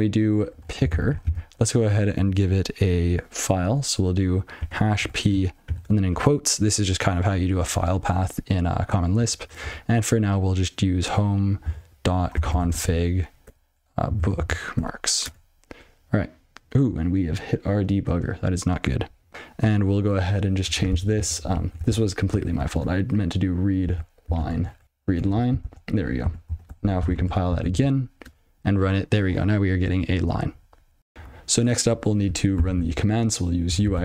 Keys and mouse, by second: 0.0-1.6 typing, 5.0 p, 6.0 ", 9.6 /, 11.9-14.4 typing, 15.0 Tab, 15.2 Return, 18.7 click, 19.4 click, 21.8 ctrl+p, 22.7 -, 24.2-25.2 typing, 25.8 ctrl+s, 26.7 ctrl+e, 28.1 alt+p, 28.7 Return, 31.1 ctrl+f, 32.6 ctrl+alt+k, 33.6-34.0 typing.